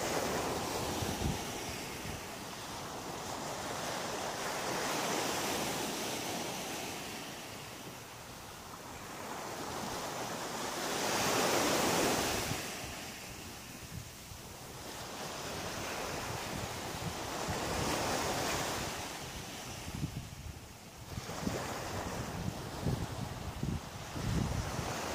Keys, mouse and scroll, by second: 0.1 click, 0.6 g, 1.7 click, 2.0 middle click, 6.1 shift+right click, 7.1 shift+right click, 8.9 click, 9.7 shift+right click, 10.0 shift+right click, 10.5 shift+right click, 10.9 shift+right click, 11.6 shift+right click, 12.2 shift+right click, 13.8 click, 14.3 click, 15.4 middle click, 22.1 middle click.